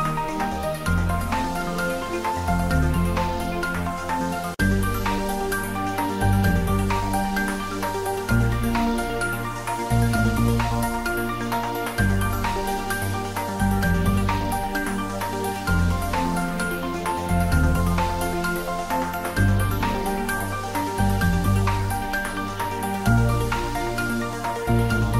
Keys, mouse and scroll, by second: 0.4 click, 0.9 Tab, 1.5 ctrl+middle click, 2.1 a, 2.6 alt+e, 3.0 click, 4.2 s, 9.0 click, 9.2 Tab, 9.4 middle click, 10.4 shift+z, 10.7 middle click, 11.9 ctrl+z, 12.9 alt+e, 13.3 click, 14.3 Tab, 14.6-16.0 middle drag, 16.2 ctrl+middle click, 16.6 click, 17.3 Tab, 18.1 middle click, 18.9 ctrl+3, 23.0 Tab, 23.6 ctrl+r.